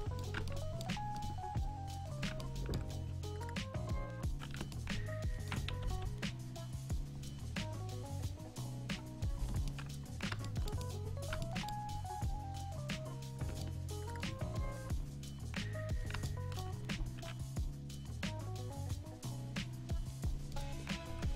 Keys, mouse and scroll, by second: 0.0 middle click, 3.0 a, 5.9 k, 18.0 k.